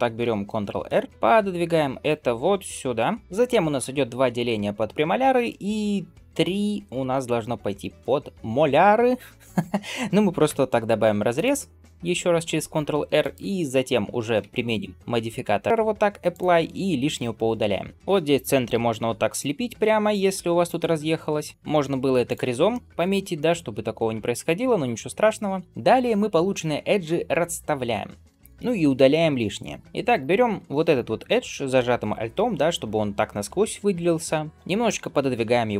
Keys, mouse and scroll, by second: 0.4 ctrl+r, 10.9 ctrl+r, 15.5-17.9 drag, 17.9 middle click, 17.9 1, 18.5 g, 20.1 alt+z, 20.5 click, 21.0 alt+z, 21.6 g, 22.5 middle click, 23.2-25.0 middle drag, 28.4 shift+middle click, 30.0 alt+click, 30.8-34.5 middle drag.